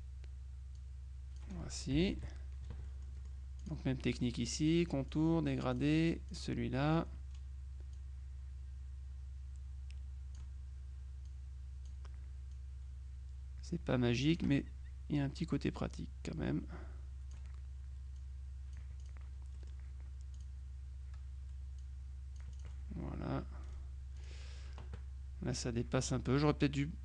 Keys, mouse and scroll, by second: 0.9 click, 2.0 KP_Subtract, 2.9-4.3 middle drag, 5.2 click, 5.8 click, 8.0-10.9 drag, 11.3 click, 12.6-14.9 drag, 15.5-17.9 drag, 18.3 click, 20.4 click, 21.9 click, 24.3 click.